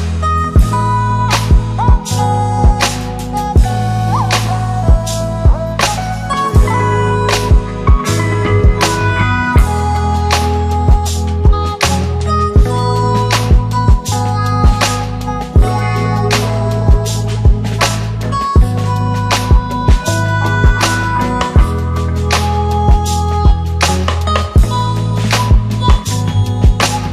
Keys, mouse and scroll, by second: 2.9 space, 4.6 click, 8.6 click, 9.8 click, 13.0 click, 13.4 s, 14.2 click, 15.1 Return, 16.8 click, 21.5-21.9 click, 24.2 click, 26.2 click, 26.9 click.